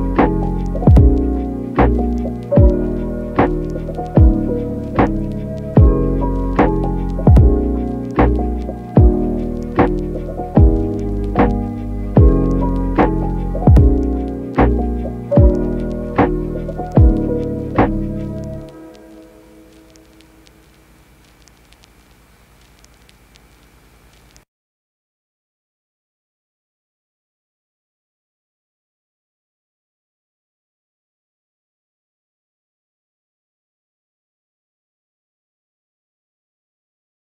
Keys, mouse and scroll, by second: 1.7 shift+a, 7.2 click, 8.0 click, 8.5-10.2 drag, 10.6 middle click, 12.4-16.7 drag, 16.9 shift+middle click, 17.7 shift+middle click, 21.2-23.6 middle drag, 26.7 click, 26.9 click, 27.2 click, 27.7 click, 27.8 click, 28.2 click, 28.7 click, 28.9 click, 29.1 click, 29.4 click, 29.7 click, 30.0 click, 30.7 click, 30.9 click, 31.3 click, 31.6 click, 31.9 click, 34.2 click, 34.7 click, 35.6 click, 35.9 click, 36.3 click.